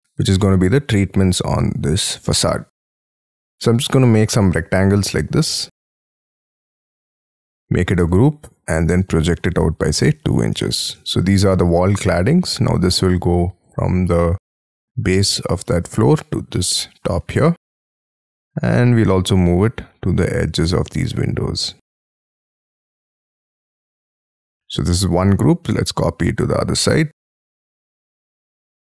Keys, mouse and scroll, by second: 2.0 middle click, 3.0-3.5 scroll up 11, 3.7 r, 6.1 space, 6.6 double click, 7.5 g, 8.1 double click, 8.5-9.0 scroll up 7, 9.0 p, 10.0 2, 10.6 shift+', 11.0 Return, 11.5 scroll up 5, 12.7-14.0 scroll down 27, 14.4 middle click, 15.1 scroll up 5, 16.5 middle click, 17.5 scroll up 6, 17.8 middle click, 18.4-19.4 scroll up 18, 21.0-21.8 scroll up 10, 22.3 middle click, 22.4 scroll down 11, 22.7 scroll up 8, 23.7 scroll up 1, 23.8-24.9 scroll down 17, 24.2 Escape, 24.9 middle click, 25.3 m, 25.4-25.8 scroll up 5, 28.4-28.9 shift+scroll up 6.